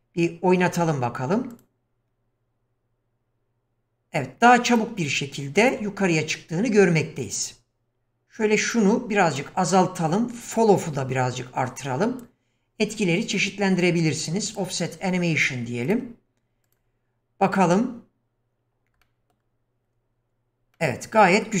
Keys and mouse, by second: 1.5 click, 4.7 click, 8.0-9.5 drag, 10.0-12.3 drag, 14.5 click, 16.8 click, 19.0-19.4 middle drag, 20.8-21.5 middle drag.